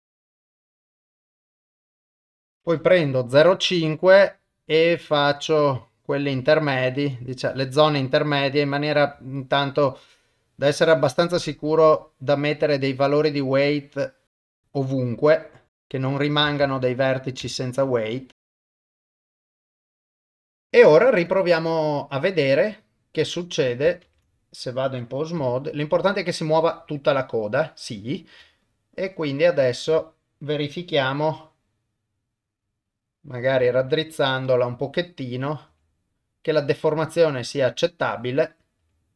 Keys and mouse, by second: 0.1 ctrl+z, 0.3 click, 1.3-2.7 drag, 4.4-6.1 drag, 6.7 ctrl+click, 7.5-8.8 drag, 9.4 ctrl+click, 10.1 click, 11.2 click, 12.7 click, 13.8 click, 14.4 click, 14.5 ctrl+z, 14.6 click, 15.4 click, 15.8 click, 16.6 ctrl+z, 17.0 click, 17.6 ctrl+click, 18.2 click, 18.7 click, 19.2 click, 19.5 click, 19.7 click, 19.9 click, 20.2 click, 20.7 ctrl+Tab, 23.4 click, 24.1 ctrl+Tab, 25.5 r, 28.6 ctrl+click, 30.0 click, 31.1 r, 33.5 click, 33.8 r, 35.2 click, 35.7 r, 38.4 click, 38.8 r.